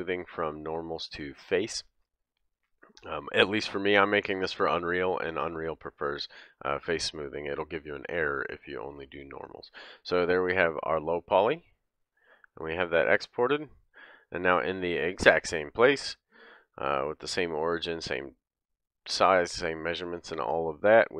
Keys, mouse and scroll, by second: 12.1-12.7 middle drag, 12.7 click, 12.8-13.7 middle drag, 13.7 click, 13.7-16.3 middle drag, 16.3 click, 16.4-21.1 middle drag.